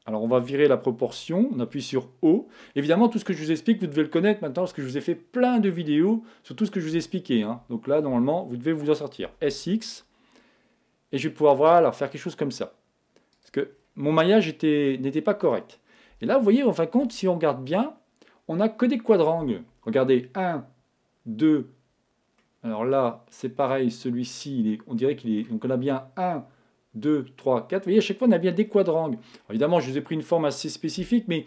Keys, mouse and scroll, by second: 1.0 o, 9.2 s, 13.4-15.2 drag, 13.7-24.0 middle drag, 16.1 Tab, 17.0 Tab, 25.0-26.7 middle drag, 28.3-30.1 middle drag, 30.1-31.1 scroll down 1, 31.1-31.4 scroll down 1.